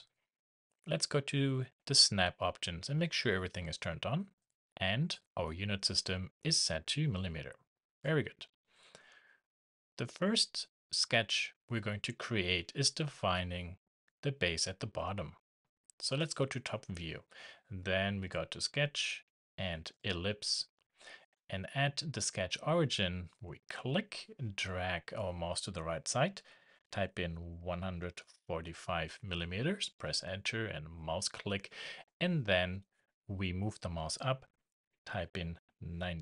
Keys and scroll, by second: 29.9 Return.